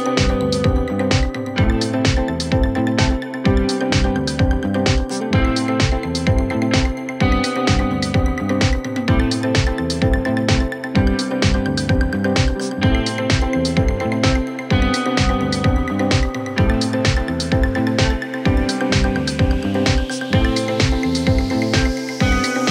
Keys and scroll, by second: 13.0 F3, 13.3 Escape, 14.4 shift+F2, 14.6 Escape.